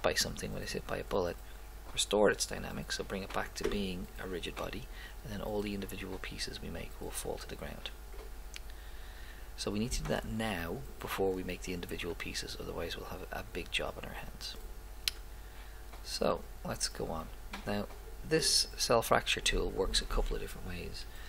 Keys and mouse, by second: 13.6 click, 14.0 click, 16.3-17.4 drag, 17.4 middle click.